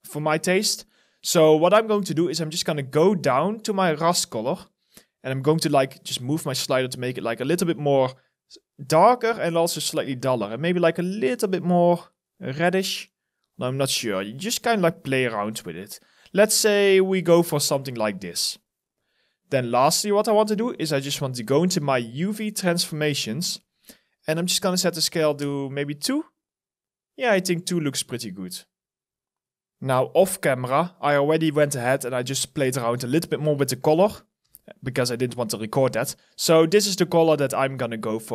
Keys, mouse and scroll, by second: 0.2-2.2 scroll down 1, 18.6-20.7 scroll up 1, 25.0 2, 25.1 Return, 33.7 ctrl+v, 34.2 Return, 37.2 alt+right click, 37.8 alt+click.